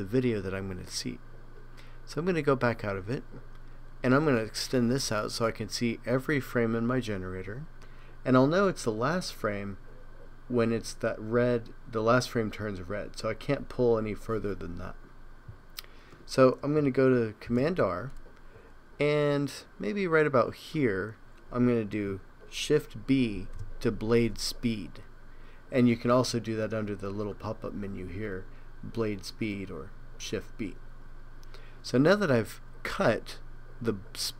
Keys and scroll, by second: 17.5 super+r, 23.4 shift+b.